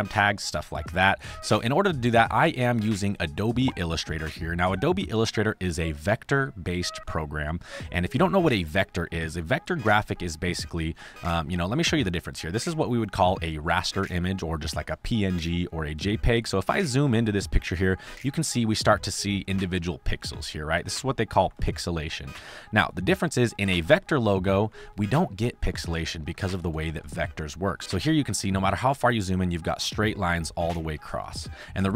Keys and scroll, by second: 4.0 space, 9.3 space, 10.9 space, 13.1 space, 22.7 space, 26.2 space, 28.0 space.